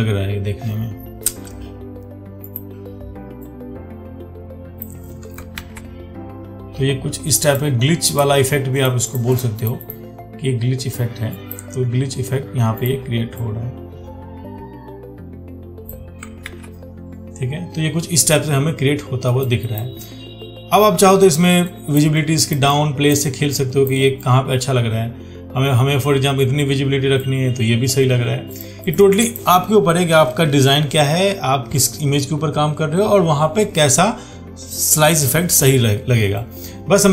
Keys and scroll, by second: 5.8 ctrl+d, 16.7 ctrl+d.